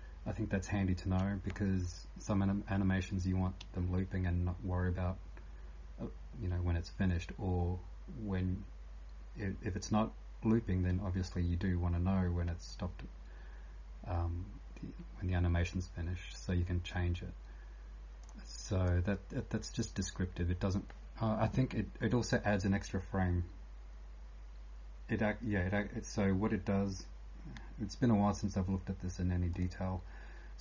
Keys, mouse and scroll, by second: 0.0-30.6 typing, 18.8 click, 29.5 click.